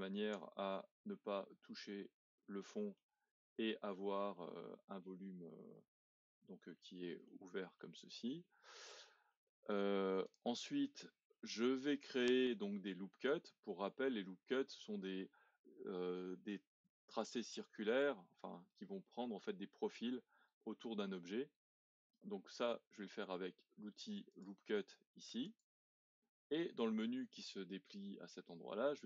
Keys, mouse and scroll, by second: 1.2 scroll down 2, 1.7 middle click, 2.4-3.0 scroll up 2, 3.0-5.5 middle drag, 5.5-6.0 scroll up 1, 6.0-6.8 scroll down 1, 6.8-10.2 shift+middle drag, 10.2 click, 11.3 middle click, 12.1-12.6 scroll up 1, 12.6-15.8 middle drag, 24.3-28.4 drag.